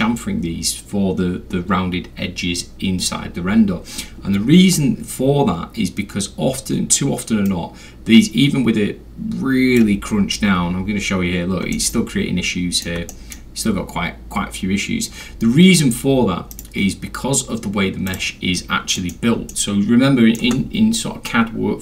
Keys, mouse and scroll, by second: 7.5-9.8 drag, 10.3 scroll, 11.6 alt+scroll, 11.7-12.8 middle drag, 13.1 alt+middle click, 15.3 scroll, 15.3 scroll down 2, 15.4-15.9 scroll, 16.5 right click, 18.1 click, 19.0 middle drag, 19.5-20.4 alt+middle drag.